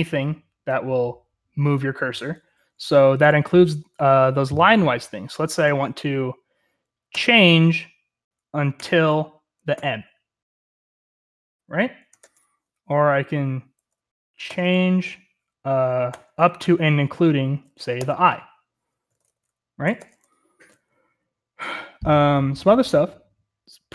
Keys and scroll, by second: 3.1-4.1 typing, 5.4 typing, 7.1 typing, 8.8-9.7 typing, 12.0-12.7 typing, 14.5 typing, 16.1 typing, 18.0-20.0 typing, 19.8 Escape.